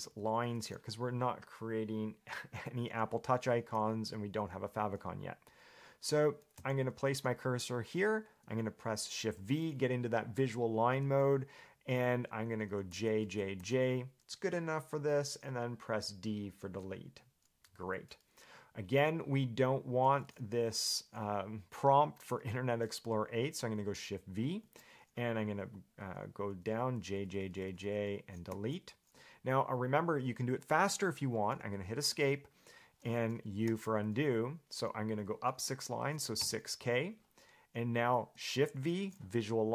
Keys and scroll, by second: 0.0-0.6 typing, 4.2 j, 6.8 k, 9.6 shift+v, 13.1 j, 13.4 j, 13.8 j, 16.8 d, 20.3 j, 20.4 j, 24.8 shift+v, 27.1-28.7 typing, 32.3 Escape, 33.9 u, 36.3 6, 36.6 k, 39.1 shift+v.